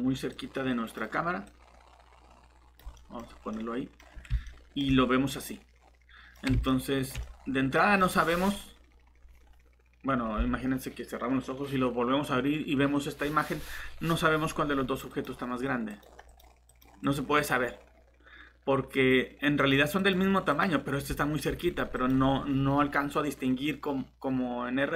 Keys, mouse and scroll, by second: 2.9 middle click, 3.2 scroll up 1, 3.5 middle click, 8.0 click.